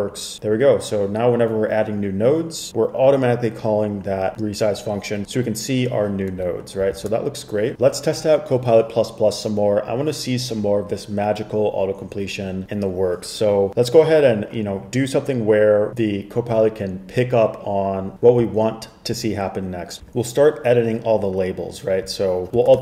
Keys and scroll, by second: 7.1 super+Tab, 22.7 super+Tab.